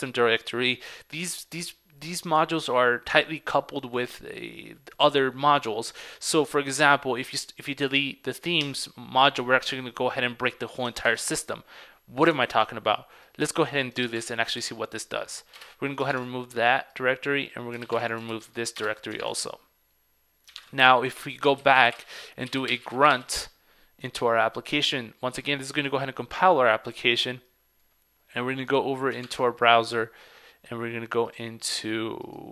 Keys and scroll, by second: 11.2 super+Tab, 14.1 super+c, 14.4 super+Tab, 14.7 super+v, 18.0 super+c, 18.1 super+Tab, 18.4 super+v, 19.3 super+Tab, 20.7 super+Tab, 29.3 super+Tab.